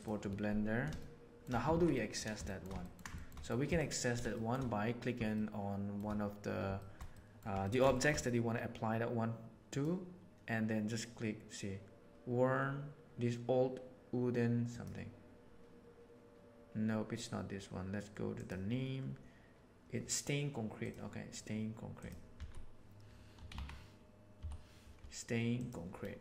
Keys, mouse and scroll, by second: 0.9-1.3 shift+middle drag, 1.7 alt+a, 1.9 middle click, 2.4 shift+middle click, 2.7 ctrl+middle click, 3.1 shift+middle click, 3.3 middle drag, 4.3 shift+middle click, 5.3-5.9 shift+middle drag, 6.7-7.3 shift+middle drag, 7.5 ctrl+middle click, 7.9 shift+middle click, 21.9 click.